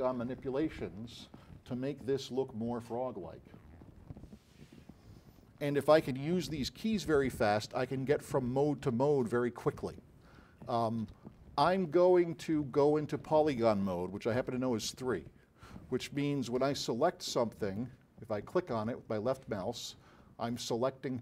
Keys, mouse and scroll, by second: 6.8-8.9 typing, 9.9 w, 10.3 e, 11.2 w, 14.5 3, 17.1 alt+click.